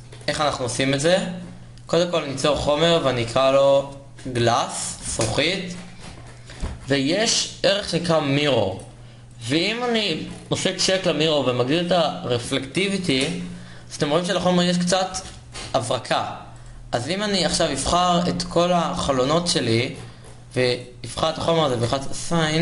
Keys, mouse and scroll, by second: 1.6 middle click, 1.9 Tab, 6.6 s, 17.1 middle click, 22.1-22.6 middle drag.